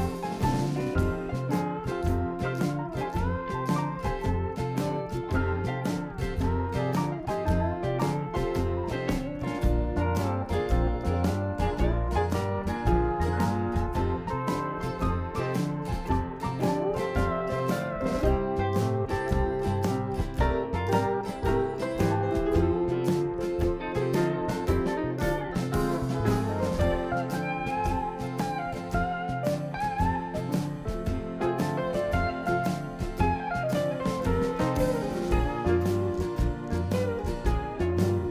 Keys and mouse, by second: 2.5-3.5 drag, 3.5-5.7 right drag, 5.7 k, 21.8 Tab, 23.6-24.9 drag, 24.9 middle click, 25.2 Tab, 26.3 Tab, 26.7 click, 26.9 Tab, 27.5-28.6 drag, 28.6 x, 28.8-30.3 drag, 30.7 ctrl+z, 31.3 x, 35.0 KP_7, 36.9 click.